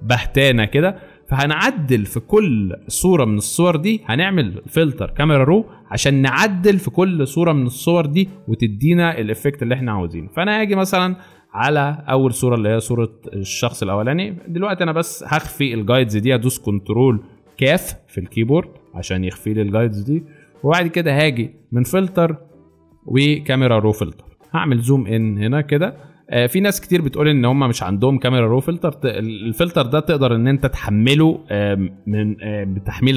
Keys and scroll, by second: 2.7 alt+space, 4.1 alt+space, 12.7 space, 18.5 ctrl+;.